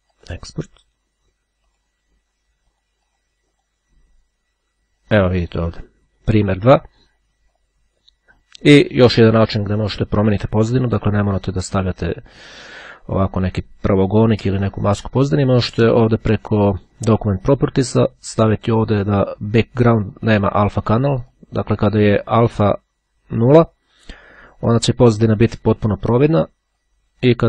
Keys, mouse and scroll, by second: 0.3 click, 1.9 click, 2.8-4.3 drag, 5.6 click, 8.7-10.1 drag, 12.0-13.9 drag, 14.0 Delete, 16.5-17.5 drag, 18.9 click, 20.1-21.9 drag, 26.3-27.4 drag.